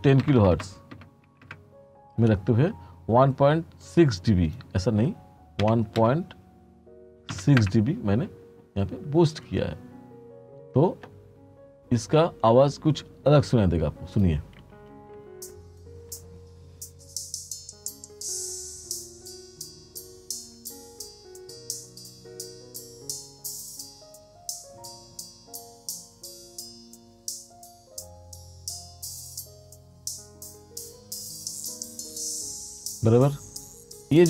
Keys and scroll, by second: 0.0 1, 0.3 0, 1.6 Return, 5.7 1, 6.1 ., 7.4 6, 7.7 Return, 14.6 space.